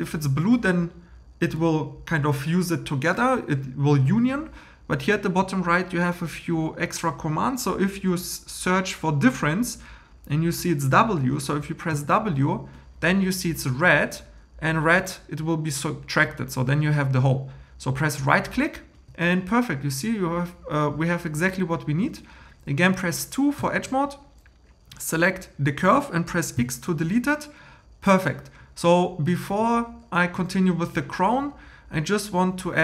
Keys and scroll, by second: 11.9 w, 23.6 2, 26.6 x.